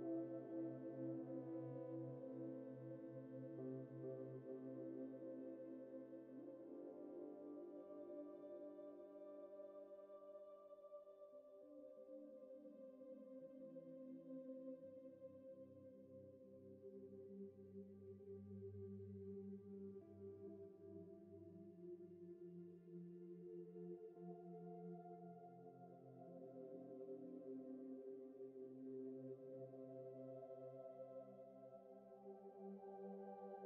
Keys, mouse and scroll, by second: 0.2 ctrl+z, 3.2 double click, 3.9 alt+click, 5.5 alt+click, 5.8 ctrl+z, 7.1 ctrl+j, 7.5 v, 8.4 shift+click, 12.0 Left, 12.5 ctrl+j, 17.1 Return, 17.7 ctrl+e, 17.9 ctrl+e, 18.8 ctrl+t, 21.6 Return, 22.6 double click, 29.6 ctrl+a, 31.7 ctrl+v, 32.5 ctrl+t, 32.9 shift+click.